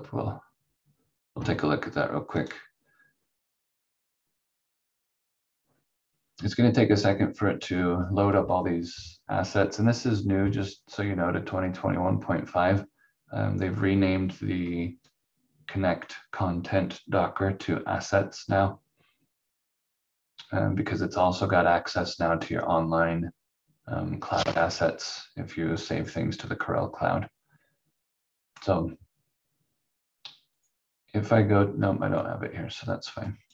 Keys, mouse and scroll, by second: 2.4 click, 25.8 click, 30.5 click.